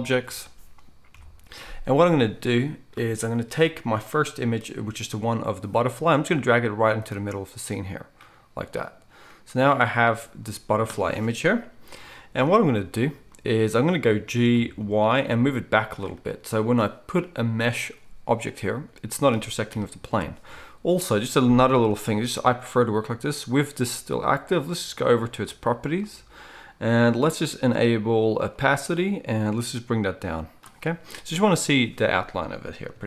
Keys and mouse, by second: 14.5 g, 17.6-32.9 middle drag, 19.6 KP_1, 32.9-33.0 shift+drag.